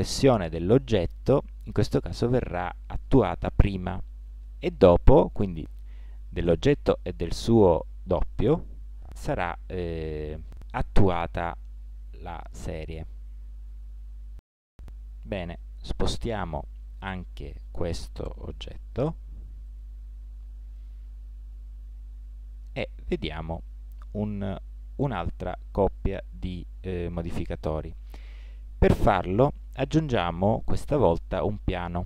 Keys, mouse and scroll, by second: 4.2 middle click, 11.3 middle click, 12.4-14.3 middle drag, 15.4 g, 17.8-19.4 right drag, 19.2 g, 21.9-25.6 middle drag.